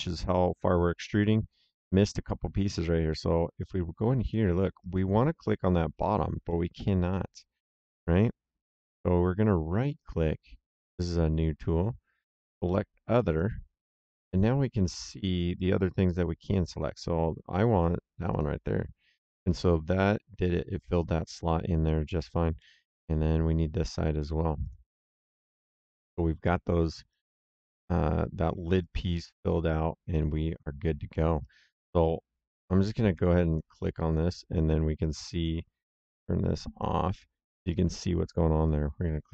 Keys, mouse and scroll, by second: 0.0 right click, 1.7 middle click, 4.2 middle click, 4.7 right click, 6.4 middle click, 6.9 right click, 9.8 right click, 13.2 click, 18.2 click, 19.4 right click, 21.2 middle click, 21.8 right click, 22.5 middle click, 24.5 click, 25.8 middle click, 26.4 right click, 27.8 right click, 30.4 click, 31.0 middle click, 31.3 right click, 33.2 Escape, 33.4 click, 36.6 click, 37.6 right click.